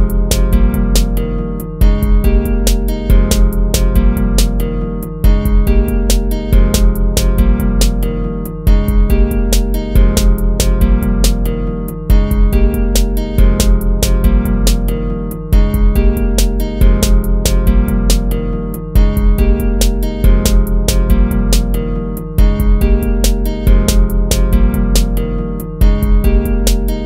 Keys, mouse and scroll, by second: 15.8 ctrl+z, 20.5 ctrl++, 24.9 ctrl+-.